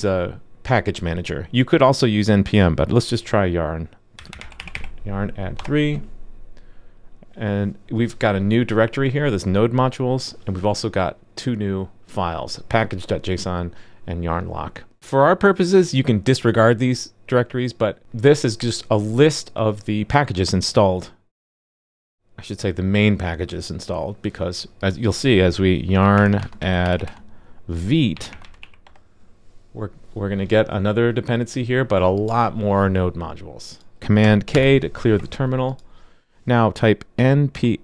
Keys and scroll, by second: 34.5 super+k.